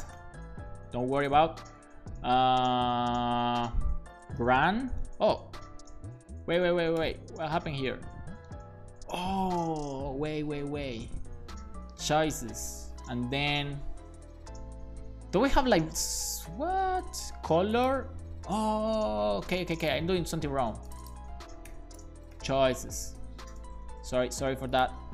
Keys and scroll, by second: 0.1 ., 4.1-5.0 typing, 12.4 Return, 12.8 ., 21.7 shift+[, 22.0 space, 22.3 c, 23.2 h, 23.8 super+s.